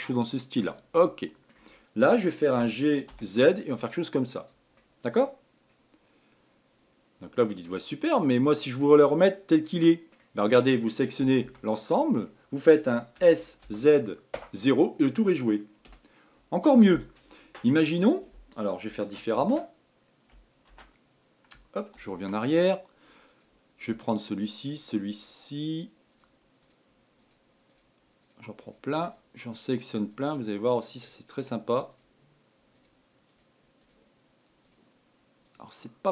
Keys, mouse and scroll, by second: 1.5-3.1 middle drag, 3.1 g, 5.3-8.3 middle drag, 8.4-9.0 scroll up 4, 9.0-10.9 middle drag, 10.9-11.6 scroll down 1, 11.7 a, 11.9 a, 12.6 scroll down 2, 12.8-13.7 scroll up 1, 13.7 s, 17.3-19.9 middle drag, 19.9 ctrl+z, 21.2 ctrl+z, 22.5 ctrl+z, 23.8 click, 24.6 shift+click, 25.1 shift+click, 25.6 shift+click, 26.2 shift+click, 26.6 shift+click, 27.1 shift+click, 27.7 shift+click, 28.2 shift+click, 28.7 shift+click, 29.2 shift+click, 29.6 shift+click, 30.0 shift+click, 30.5 shift+click, 30.9 shift+click, 31.5 shift+click, 31.9 shift+click, 32.4 shift+click, 33.2 shift+click, 33.8 shift+click, 34.3 shift+click, 35.2 shift+click, 36.0 shift+click.